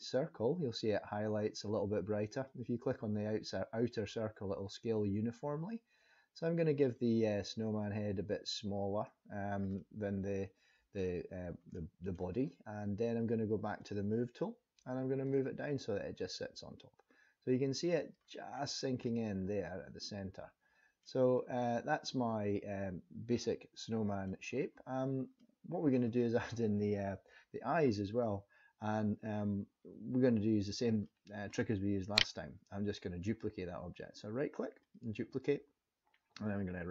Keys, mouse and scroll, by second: 2.5 click, 9.7 middle click, 11.8 middle click, 13.8 click, 15.2 click, 18.5-19.0 scroll up 3, 19.0 middle click, 21.2 scroll down 3, 21.7 middle click, 25.4 middle click, 31.0 middle click, 32.1 right click.